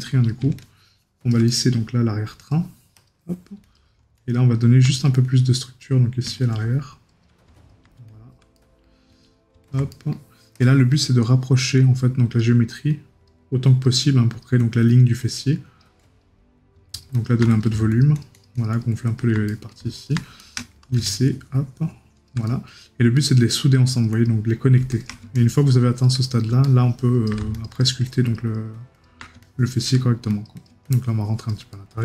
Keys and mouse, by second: 1.5 right click, 8.5 right click, 9.9 right click, 19.5 right click, 22.4 right click, 26.2 right click, 31.7 right click.